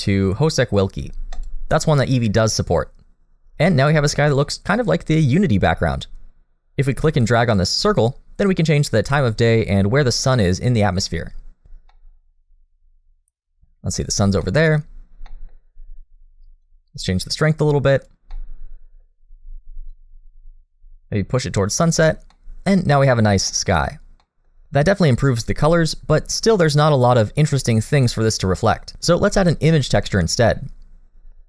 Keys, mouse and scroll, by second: 4.4 middle click, 7.3 click, 11.9 middle click, 14.4 middle click, 15.3 middle click, 16.6 click, 18.3 middle click, 19.9 click, 22.3 scroll down 1, 22.3 middle click, 23.5 middle click, 24.2 middle click, 26.5 middle click, 27.1-28.9 scroll up 1.